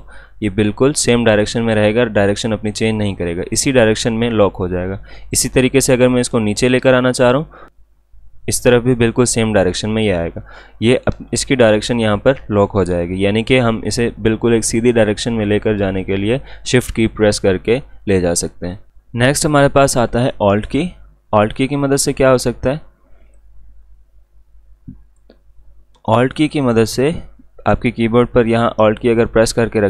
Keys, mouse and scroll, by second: 18.9 click, 22.1-26.5 drag.